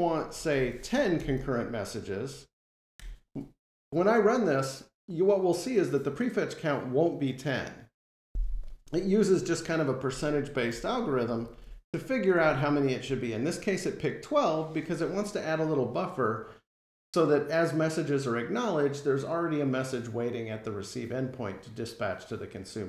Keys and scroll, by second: 1.0 alt+super+Return, 2.7 F5.